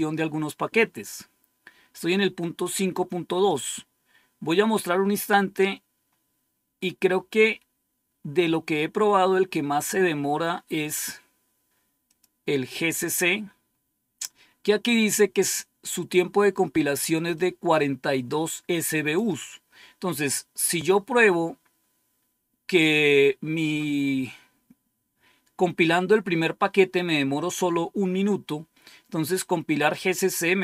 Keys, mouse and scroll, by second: 3.3 click, 5.0-6.4 scroll down 1, 6.4-6.9 scroll down 1, 7.4-8.0 scroll down 1, 8.0-8.7 scroll down 1, 10.0-10.6 scroll down 1, 10.6-11.1 scroll up 1, 11.9 click, 17.2-19.1 drag, 19.7 click.